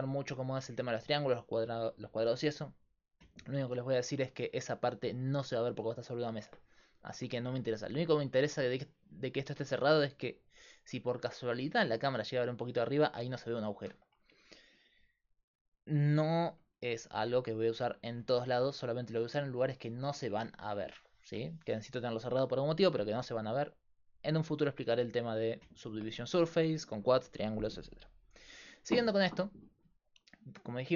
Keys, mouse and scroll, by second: 0.2 middle click, 4.4 Tab, 18.1-21.1 right drag, 29.5-30.9 right drag.